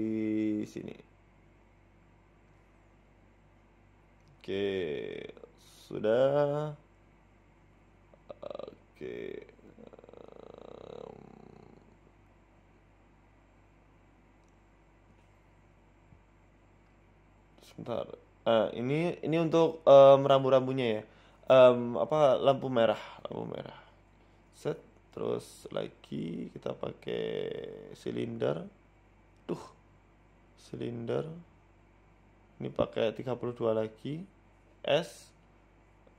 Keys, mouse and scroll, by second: 0.0-0.8 scroll up 5, 0.2 shift+middle click, 0.2 z, 0.7 middle click, 1.3 shift+middle click, 1.6 g, 3.1 middle click, 3.5-4.2 scroll down 6, 3.7 middle click, 4.1 shift+middle click, 4.4 scroll up 3, 4.6 shift+middle click, 5.2 KP_1, 6.4 g, 8.1 z, 8.8 shift+middle click, 9.1-10.2 scroll down 3, 11.2 shift+a, 14.1-14.6 scroll down 2, 14.6-15.2 scroll up 5, 15.2 s, 17.2 ctrl+z, 18.5 ctrl+shift+z, 19.3 g, 20.5 shift+middle click, 21.2 g, 22.0 s, 22.8 s, 24.4 s, 24.4 g, 26.8 shift+s, 27.6 shift+a, 29.9 ctrl+z, 30.1 Tab, 31.3 click, 31.6 shift+a, 34.2 click, 35.6 s.